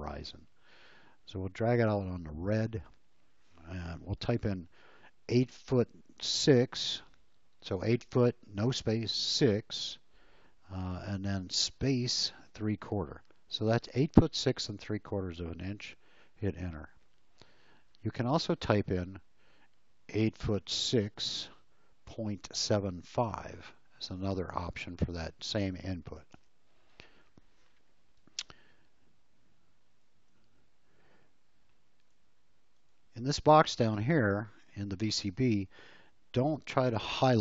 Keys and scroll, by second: 5.3 8, 11.8 space, 12.5 3, 12.7 /, 16.7 Return, 20.1 8, 20.3 !, 26.3 Return, 28.3 space, 30.4 l.